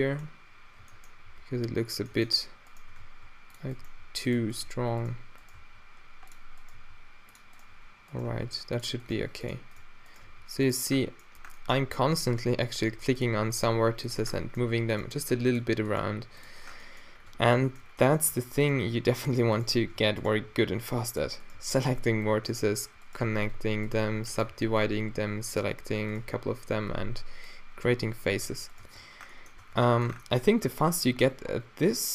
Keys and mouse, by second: 0.0-5.6 typing, 2.7-3.7 drag, 6.8 g, 8.3 d, 9.2 g, 10.3 g, 11.1-12.2 middle drag, 12.4 middle drag, 12.9 g, 13.3-14.7 middle drag, 13.8 g, 14.7-16.1 drag, 15.2 g, 16.1 g, 17.3 Tab, 17.3-17.9 drag, 18.3 Tab, 19.6 click, 20.0 alt+w, 20.5 g, 21.6 g, 23.2 f, 23.6 alt+w, 24.1 g, 24.5 a, 24.7 b, 26.4 f, 26.9 a, 27.1 b, 28.3 g, 28.8 f, 29.6 Tab, 29.8 middle drag, 30.7 Tab.